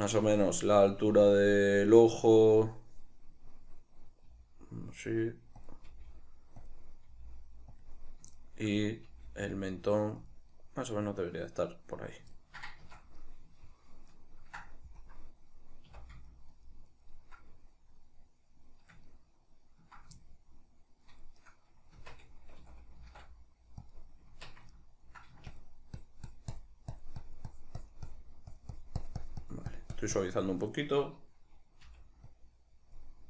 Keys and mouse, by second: 5.8 click, 6.0 g, 6.9 click, 7.2 g, 8.0 click, 8.5-10.5 shift+middle drag, 9.2 g, 10.5 click, 10.7-21.5 middle drag, 12.9 Tab, 15.1 KP_Decimal, 16.0 a, 21.5 right click, 22.1 Tab, 22.7 a, 24.0 click, 24.4 Tab, 24.8 ctrl+middle click, 25.6-33.2 shift+drag, 32.0 g.